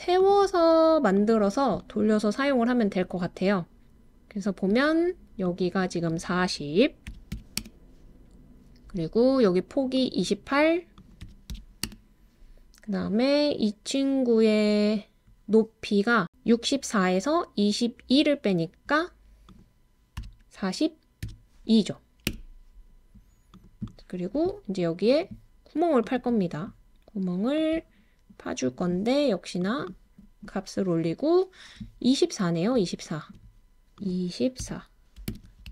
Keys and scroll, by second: 7.1-7.6 typing, 11.2-11.8 typing, 20.3-21.2 typing, 22.3 typing, 34.6-35.7 typing.